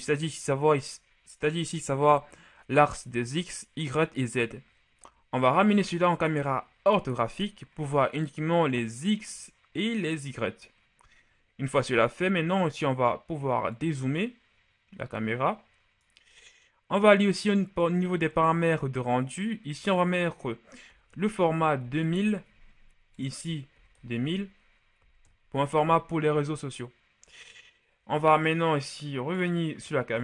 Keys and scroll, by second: 20.8 KP_2, 21.0 KP_0, 21.2 KP_0, 21.7 KP_0, 21.9 Return, 23.6 KP_2, 23.8 KP_0, 23.9 KP_0, 24.9 KP_0, 25.5 Return.